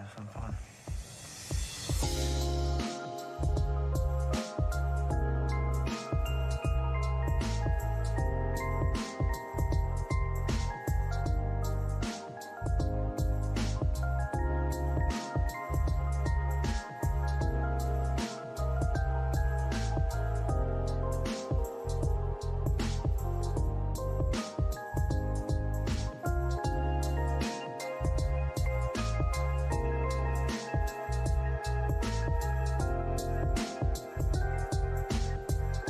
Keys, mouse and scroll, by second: 0.1 alt+scroll up 1, 0.3 scroll down 1, 2.3 ctrl+click, 3.7 alt+middle click, 6.5 middle click, 7.5 alt+click, 9.6 double click, 9.9 scroll down 1, 10.1 alt+middle click, 10.5 scroll down 1, 11.0 alt+click, 13.5 double click, 16.4 alt+click, 18.7 alt+middle click, 19.4 double click, 20.0 scroll down 1, 20.3 alt+click, 22.2 scroll up 1, 23.2 alt+middle click, 23.6-24.0 alt+scroll up 2, 24.0 right click, 25.3 scroll up 1, 25.9 ctrl+click, 29.8 alt+click, 31.3 alt+middle click, 34.3 double click, 34.5 scroll up 1.